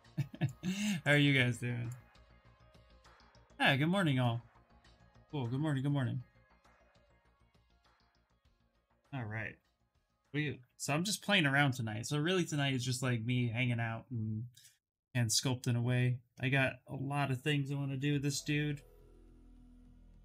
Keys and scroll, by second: 1.9 ctrl+v, 2.2 Return.